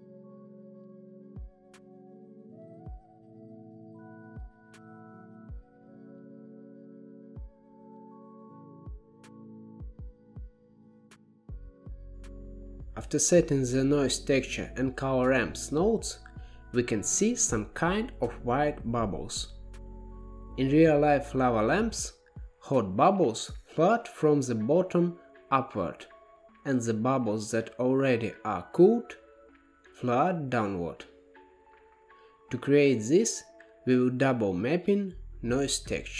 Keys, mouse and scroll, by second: 1.7 middle click, 2.4 scroll down 9, 2.6 middle click, 2.9 click, 3.7 g, 4.3 drag, 4.6 shift+a, 6.1-7.2 scroll up 7, 6.6 middle click, 7.2-8.2 drag, 9.1 click, 11.1-14.4 drag, 18.6-20.7 middle drag, 20.7-23.8 drag, 29.2-32.2 middle drag, 32.8-35.8 drag.